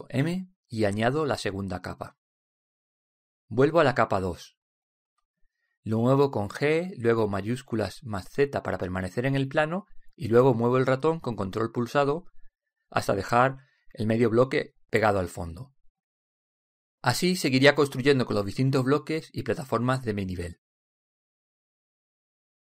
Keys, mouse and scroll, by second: 0.7 m, 4.6-6.3 drag, 7.3 g.